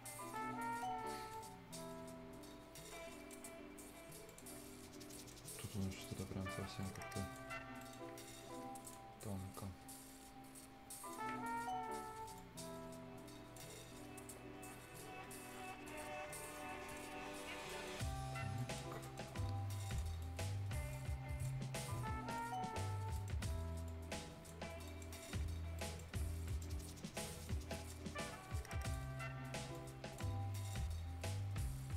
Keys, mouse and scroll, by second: 0.3 right click, 0.8 scroll down 1, 1.0 scroll up 1, 1.3-4.2 right drag, 4.2 click, 4.5 scroll down 1, 5.1 right click, 5.4 scroll up 1, 5.9 right click, 6.2 scroll down 1, 6.4 scroll up 1, 6.8 click, 7.5 scroll down 1, 7.8 right click, 8.8 click, 9.1-9.9 scroll up 1, 9.9-13.7 drag, 13.7 scroll down 1, 14.1-14.9 scroll up 1, 14.9 click, 16.0 scroll down 1, 16.4 right click, 17.1 scroll up 1, 17.6 right click, 17.7 right click, 18.5 click, 19.0 right click, 19.8 click, 20.2 right click, 20.9 click, 21.7 scroll up 1, 22.3 click, 23.1 right click, 23.8 click, 24.8 right click, 25.2 scroll up 1, 25.7 right click, 26.2 scroll up 1, 26.4 right click, 26.7 scroll down 1, 26.9-27.4 scroll up 1, 27.4 click, 28.0-28.5 scroll up 1, 28.5 click, 29.4 scroll up 1, 29.7 click, 30.3 scroll down 1, 30.5 right click, 31.0 scroll up 1.